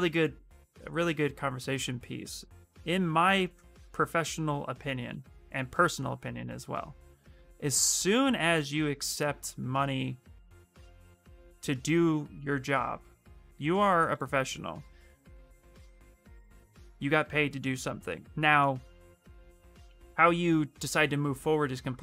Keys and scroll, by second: 6.7 ctrl+space, 13.2 x, 16.3 ctrl+space, 21.4 ctrl+space.